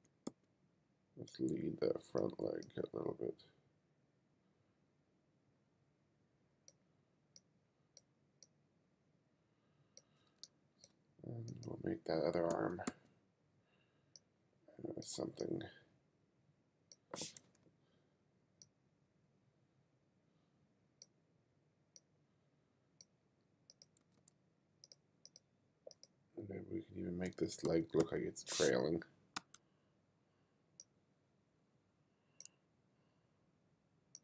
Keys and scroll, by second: 10.5 space, 12.5 b, 17.5 m, 24.1 m, 27.3 b, 29.4 4, 29.9 4.